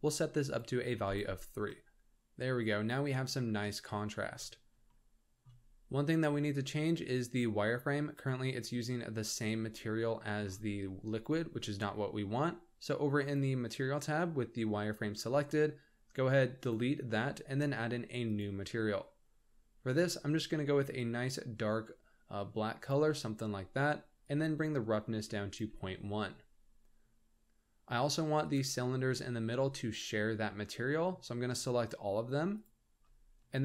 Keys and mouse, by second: 0.5 click, 4.9 shift+middle drag.